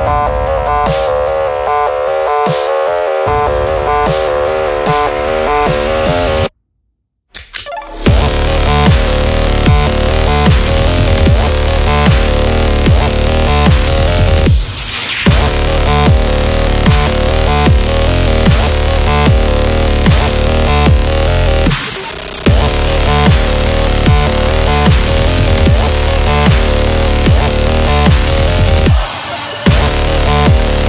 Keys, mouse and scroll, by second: 0.3 scroll down 1, 0.7 space, 0.9 click, 0.9 space, 2.3 click, 5.6 shift+s, 6.3 t, 8.2 click, 8.5-14.9 typing, 15.5 click, 16.2 scroll up 1, 16.9 click, 17.8 scroll up 1, 18.0 Left, 19.5 click, 20.8 scroll down 1, 21.3 ctrl+t, 22.0 Return, 22.7 click, 24.2 scroll up 1, 24.9 scroll down 1, 25.1 Up, 26.8 Down, 28.0 click, 28.9 scroll up 1, 29.8-30.8 drag.